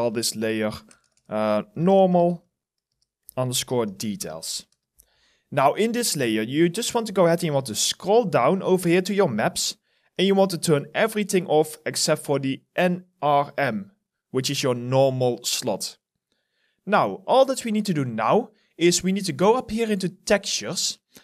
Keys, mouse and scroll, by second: 0.0-4.6 typing, 4.7 Return, 8.1-10.2 scroll down 1.